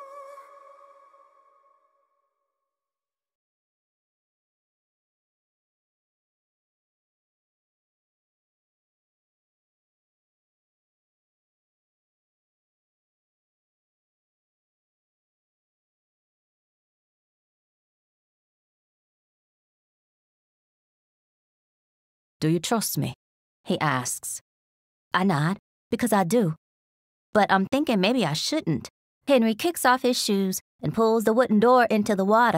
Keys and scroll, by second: 21.4 Return, 21.7 t, 21.9 space, 23.4 r, 24.7 r, 27.8 shift+scroll, 29.7 scroll, 30.1 r, 31.5 r.